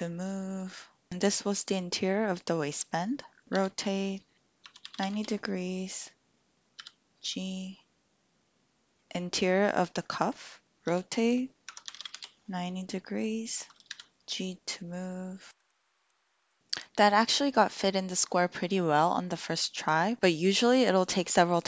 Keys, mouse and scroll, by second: 3.4 Escape, 3.5 r, 4.5 KP_Subtract, 4.9 KP_9, 5.1 Return, 5.1 KP_0, 6.7 g, 10.9 r, 11.6 KP_Subtract, 11.9 KP_9, 11.9 KP_0, 12.1 Return, 13.9 g, 15.6 shift+middle click, 16.0 shift+middle click, 16.3 shift+middle click.